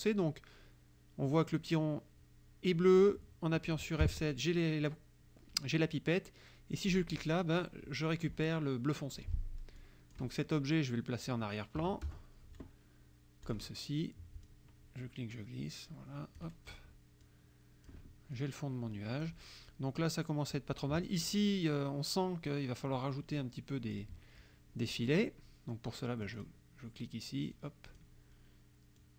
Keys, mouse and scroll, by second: 4.1 F7, 7.0 click, 9.2 click, 9.8 click, 11.8 KP_Subtract, 12.1 KP_Add, 13.5 click, 14.5-16.6 drag, 17.3 click, 18.4-19.5 drag, 24.0 click, 25.0 click, 26.2 click, 27.5 click, 29.0-29.1 drag.